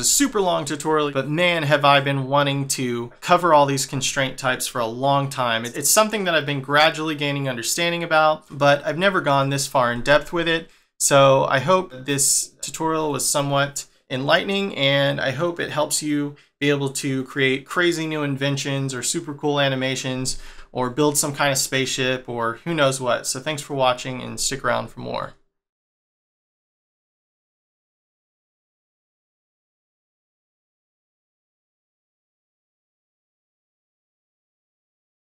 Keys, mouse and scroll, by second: 9.6 scroll up 1, 9.9 middle click.